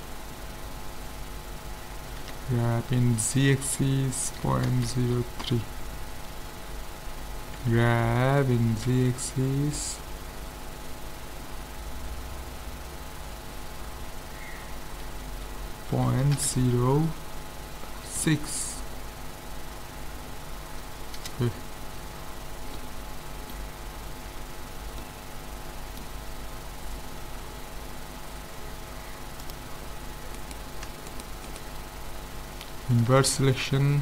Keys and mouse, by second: 2.2 g, 7.6 g, 22.1-25.0 middle drag, 24.3 z, 29.4-31.2 drag, 30.4-33.1 right drag, 33.0 ctrl+i.